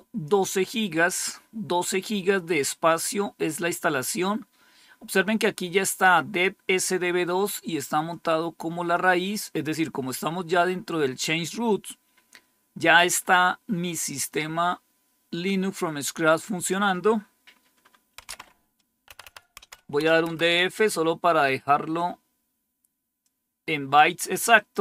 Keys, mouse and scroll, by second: 17.9-20.2 typing, 23.1 click, 24.5 click.